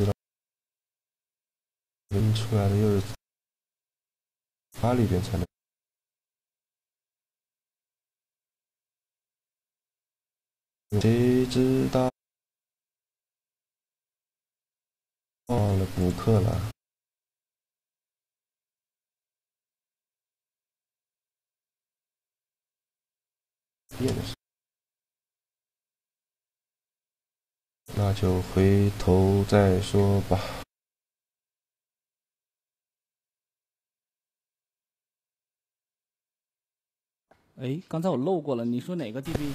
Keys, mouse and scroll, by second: 1.7 Tab, 5.5-7.2 drag, 7.0 shift+g, 8.4 right click, 8.8 shift+g, 13.5 click, 13.5-17.3 right drag, 14.5-16.2 drag, 15.0 middle click, 15.7 middle click, 16.4 e, 18.1 a, 18.8-20.3 right drag, 20.6 shift+g, 23.0-24.7 drag, 23.5 shift+g, 25.7-26.9 drag, 29.0 z, 30.1 a, 30.3 a, 30.5 b, 31.3 click, 32.5 shift+g, 34.2-35.4 drag, 35.4 z, 36.1 click, 37.2 Tab, 37.7 Tab, 38.5 click, 38.5-39.5 right drag.